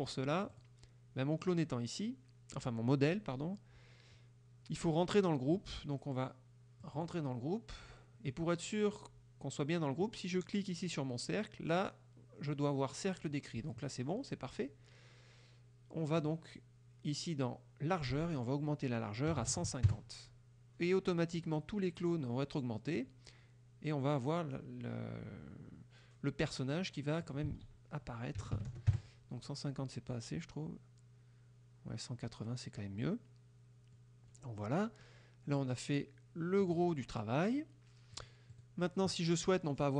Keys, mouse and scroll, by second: 0.6 click, 6.9 click, 10.1 click, 16.3 click, 18.2 ctrl+a, 19.4 KP_1, 19.5 KP_5, 19.6 KP_0, 20.0 KP_Enter, 27.3 ctrl+click, 27.6 ctrl+a, 28.4 KP_1, 28.6 KP_8, 28.8 KP_0, 29.0 KP_Enter, 34.0 middle click, 36.7 click, 38.2 click, 38.6 click.